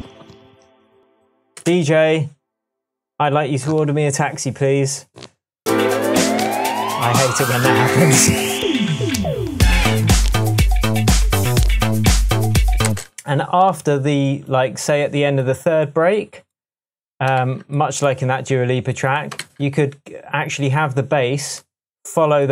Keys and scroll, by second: 1.5 space, 2.6 space, 12.8 space, 17.4 super+c, 19.4 v.